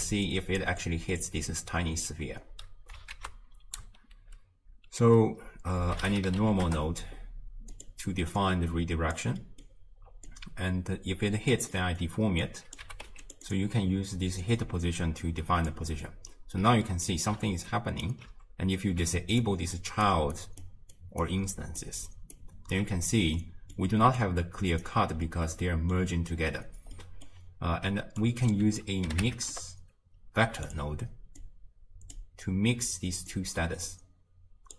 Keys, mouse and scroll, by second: 0.6 d, 0.8 click, 1.2 d, 9.1 Left, 10.3-11.6 drag, 12.4 click, 13.5-15.7 drag, 18.1 ctrl+alt+Right, 19.5 ctrl+alt+Right, 20.1 ctrl+alt+Right, 20.7 ctrl+alt+Right, 21.2 ctrl+alt+Right, 21.8 ctrl+alt+Right, 22.4 ctrl+alt+Right, 23.4 middle click, 24.2-25.4 right drag, 25.4-28.2 middle drag, 28.2-28.5 drag, 32.2 click, 33.3-34.7 drag.